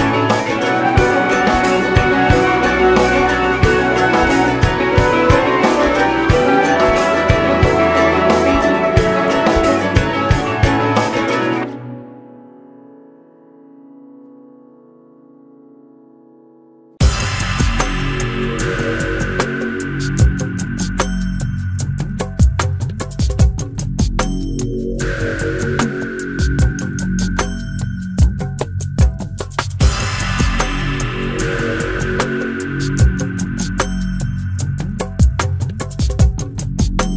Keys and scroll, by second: 1.3 alt+s, 7.3 alt+z, 13.5 alt+z, 17.8 ctrl+e, 19.2 ctrl+e, 20.5 ctrl+e, 23.9 ctrl+e, 28.1 ctrl+b, 35.0 ctrl+e, 36.7 ctrl+z.